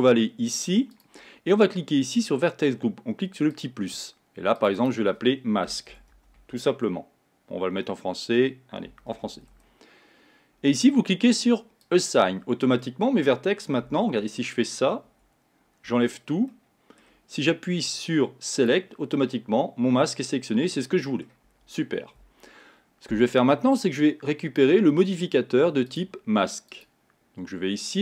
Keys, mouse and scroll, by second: 1.0 click, 3.6 click, 4.7 click, 4.9-7.9 drag, 12.0 click, 12.9-14.3 middle drag, 14.3 Tab, 15.2 Tab, 16.0 a, 16.6-18.7 middle drag, 18.7 click, 19.3-21.6 middle drag, 21.6 Tab, 24.0-26.1 drag, 26.8-28.0 drag.